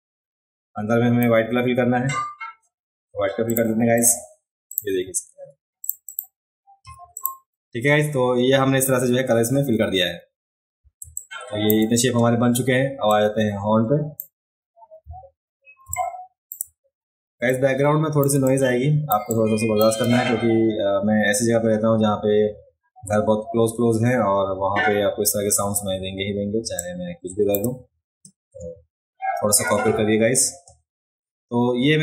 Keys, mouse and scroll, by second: 3.5 click, 3.9 click, 4.7 click, 5.8 click, 6.0 click, 6.8 v, 7.1 click, 10.4 alt+middle click, 10.4-10.9 alt+scroll up 1, 11.0 space, 11.1 click, 13.1-14.2 drag, 15.1-15.6 alt+scroll up 1, 15.8 space, 15.9 click, 17.4 click, 18.3 space, 18.4 click, 19.3 click, 26.6 space, 26.7 click.